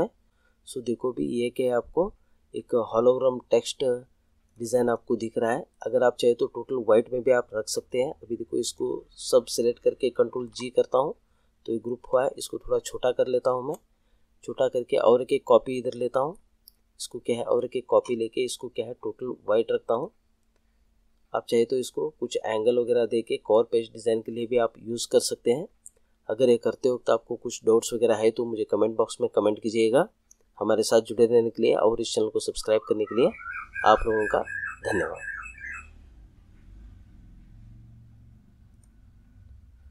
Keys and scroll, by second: 10.3 ctrl+g.